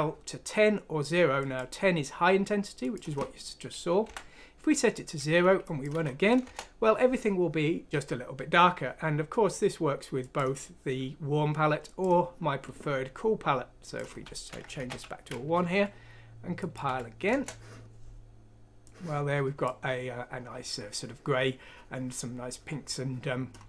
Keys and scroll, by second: 4.0 Delete, 5.9 F6, 6.4 Return, 14.7 typing, 16.8 F6, 17.2 Return.